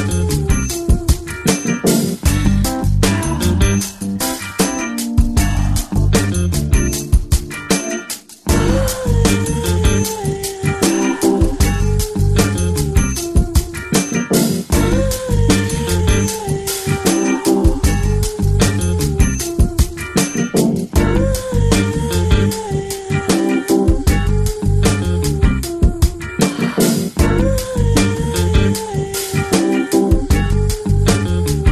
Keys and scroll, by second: 0.0-0.8 typing, 9.3 ctrl+space, 11.8 ctrl+space, 14.5 [, 14.6 [, 15.2 [, 15.5 [, 18.2 [, 18.4 [, 18.8 [, 21.9 [, 25.8 ], 26.3 ], 26.5 ], 30.2 ], 30.9 ].